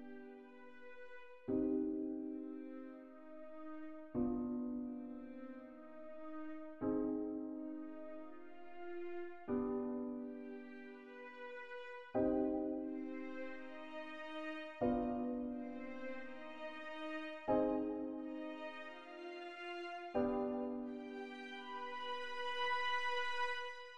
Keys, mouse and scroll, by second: 2.1 d, 10.4 click, 13.3 click, 17.3 click.